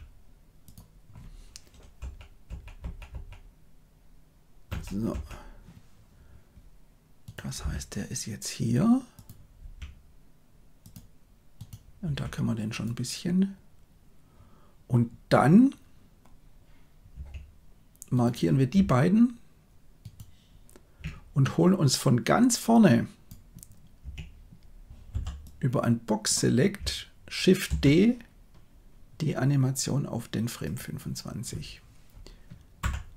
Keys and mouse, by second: 1.9 Right, 2.4 Right, 2.7 Right, 3.0 Right, 4.6 Right, 5.0 Right, 7.5 g, 9.5 r, 11.5 right click, 11.9 r, 17.0 a, 22.7 click, 25.0 b, 27.6 shift+d, 32.7 Left.